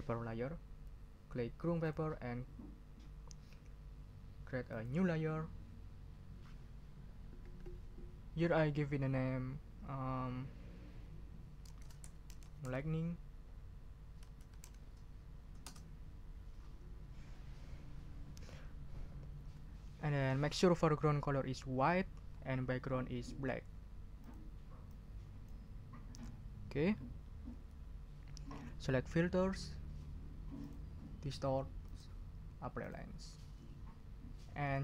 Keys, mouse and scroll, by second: 1.8 click, 4.7 click, 11.6-15.1 typing, 15.6 Return, 24.2 click, 24.9 click, 26.1 click, 30.6 click, 31.8 click, 32.8 click.